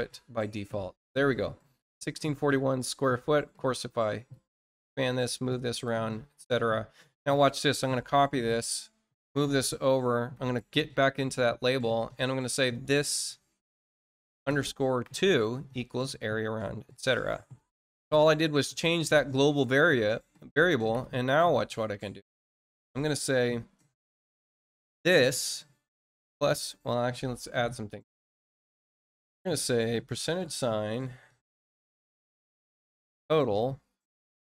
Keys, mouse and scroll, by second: 3.8 click, 5.4 click, 8.5 click, 12.4 click, 14.3 shift+-, 17.0 click, 18.0 scroll down 2, 18.6 middle click, 21.4 click.